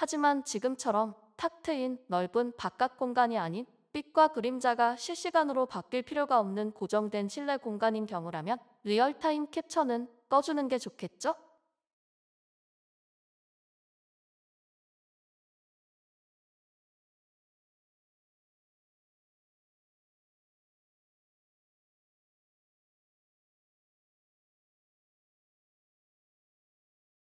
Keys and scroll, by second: 0.0-1.7 typing.